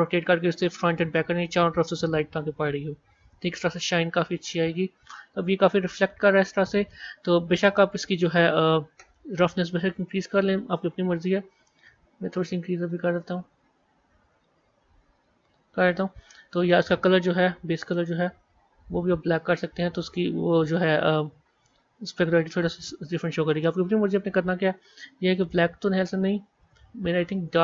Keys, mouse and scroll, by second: 3.2-5.3 middle drag, 5.3 scroll down 1, 5.5-6.3 scroll up 6, 7.1-7.9 scroll down 4, 8.2 click, 9.9 click, 12.3-15.3 drag, 17.7 click, 22.9-23.7 middle drag, 23.7 scroll up 5, 25.5 click.